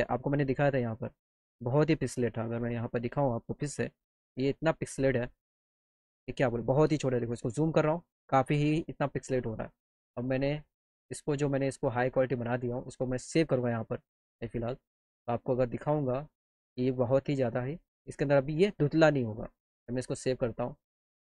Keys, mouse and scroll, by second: 0.0 click, 2.2 click, 3.8 click, 5.0 click, 5.1 click, 10.2 click, 11.5 click, 12.3 click, 14.6 click, 15.8 click, 19.9 click, 21.1 click.